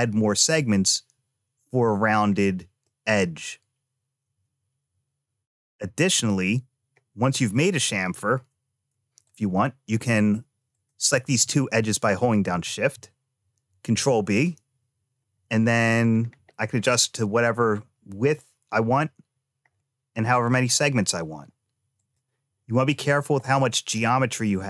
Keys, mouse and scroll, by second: 0.4-1.7 middle drag, 2.1-2.6 scroll down 1, 2.7-6.0 middle drag, 9.1 click, 10.6 shift+click, 11.4 middle click, 13.5 ctrl+b, 22.7 click, 23.3-24.6 middle drag.